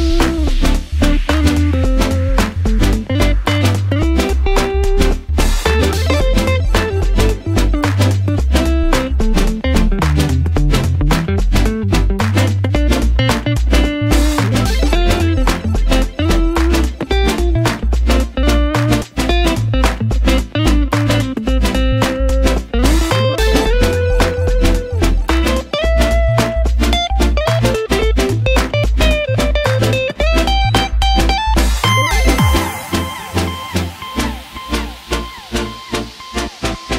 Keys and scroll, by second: 22.8 ctrl+c, 22.9 ctrl+v, 27.5 ctrl+c, 27.6 ctrl+v.